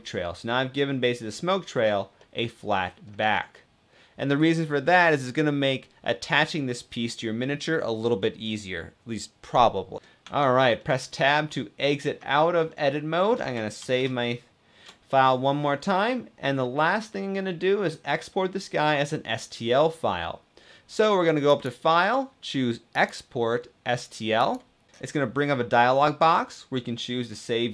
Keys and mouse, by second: 1.9 middle click, 3.5 middle click, 10.1 Tab, 10.6-11.9 middle drag, 11.9 click, 12.4-13.0 middle drag, 13.6 ctrl+s, 14.8 shift+middle click, 21.2-24.4 drag.